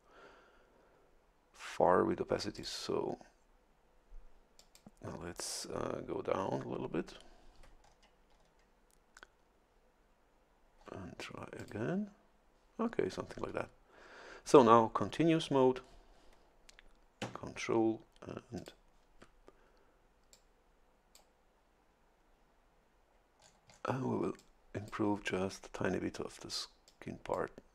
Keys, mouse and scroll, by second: 2.6 click, 4.6 click, 7.8-8.1 ctrl+scroll down 2, 8.4-8.8 ctrl+scroll down 2, 11.6 click, 18.6 ctrl+click, 20.3-21.3 drag, 23.4-24.0 scroll down 2, 24.4 click, 26.9 click.